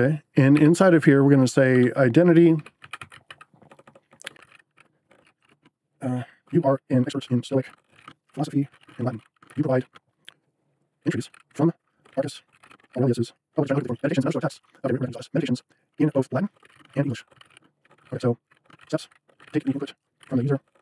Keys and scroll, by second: 0.0-20.8 typing.